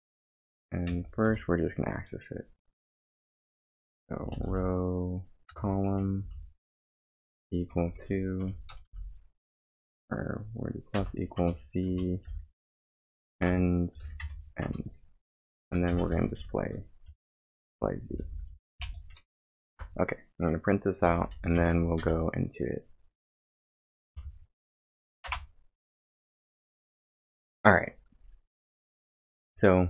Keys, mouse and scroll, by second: 4.0-7.0 typing, 8.4 shift+=, 8.9 space, 10.9 c, 11.4 Return, 11.9 Return, 12.3-14.0 typing, 14.7 Return, 15.3 Return, 15.4-17.2 typing, 18.5-19.3 typing, 19.7 ctrl+', 20.8-22.1 typing, 24.1 Tab, 25.2 Return.